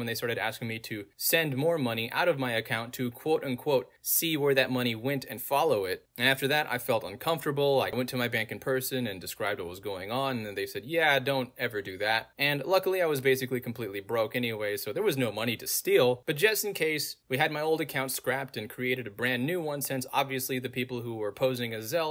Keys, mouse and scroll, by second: 1.4 click, 3.4 click, 4.8 click, 5.2 middle click, 5.2 scroll down 2, 6.6 click, 7.2 middle click, 7.2-8.2 scroll down 2, 8.6 click, 9.1 middle click, 9.1 scroll down 2, 9.7 click, 10.6 middle click, 10.6 scroll down 2, 12.2 middle click, 12.2-12.7 scroll down 2, 13.2 click, 13.8 middle click, 13.8-14.2 scroll down 2, 14.7 click, 16.3 click, 17.3-19.2 middle drag, 17.3-19.0 scroll down 2, 19.0 scroll down 1, 20.0 click.